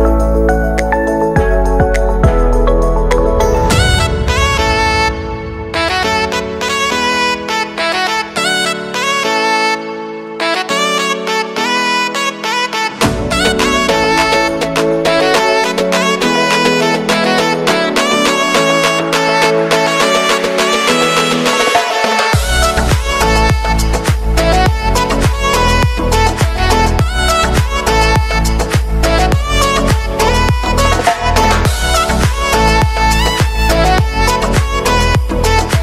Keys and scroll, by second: 0.4 ctrl+z, 0.9 ctrl+alt+z, 3.3 space.